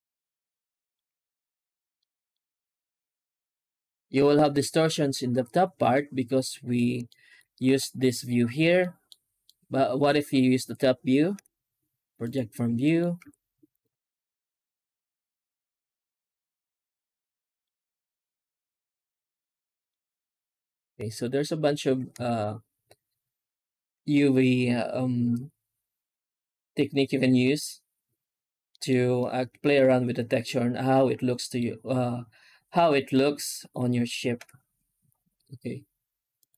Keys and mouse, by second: 0.5 shift+middle click, 1.8 middle click, 3.0 z, 4.3 middle click, 5.8 middle click, 6.9 shift+middle click, 7.2 middle click, 7.5 Tab, 8.7 middle click, 9.3 alt+middle click, 11.2 u, 12.5 Tab, 12.7 middle drag, 13.1 z, 17.4 middle drag, 19.5 middle drag, 19.7 middle click, 20.4 z, 21.1-21.6 middle drag, 21.7 Tab, 28.7 middle click, 29.0-31.4 middle drag, 33.0 middle click, 34.2 u.